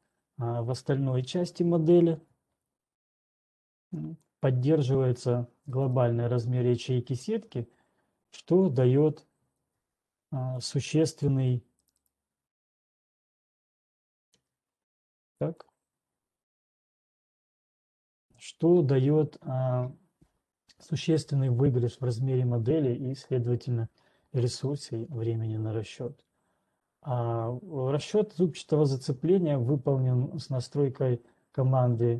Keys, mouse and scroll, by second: 2.6 click, 4.1 click, 6.7 right click, 10.6 click, 11.1 click, 12.1 right click, 15.7 click, 16.7 click, 17.4 scroll, 20.4 click.